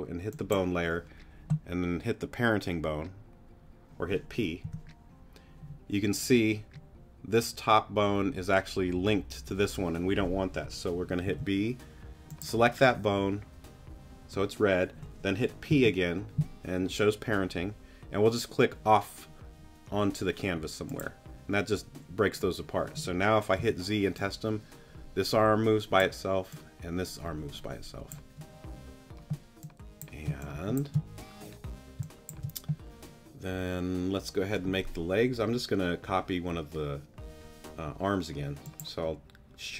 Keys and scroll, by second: 4.6 p, 11.2 b, 15.7 p, 23.6 z, 30.2 space, 32.0 space.